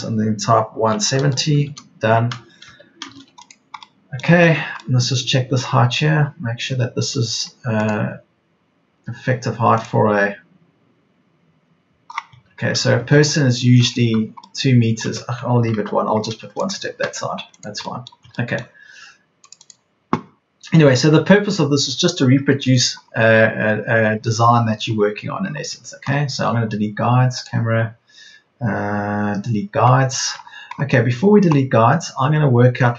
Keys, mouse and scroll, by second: 0.7 KP_1, 1.0 KP_7, 1.2 KP_0, 2.6 Escape, 15.0 Escape, 15.7 ctrl+z, 17.6 Escape, 21.0 Escape.